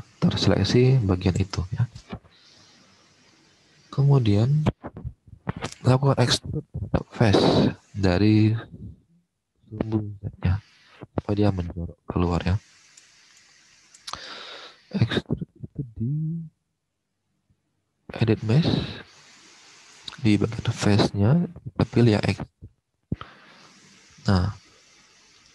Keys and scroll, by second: 1.5 alt+Tab, 10.3 alt+Tab.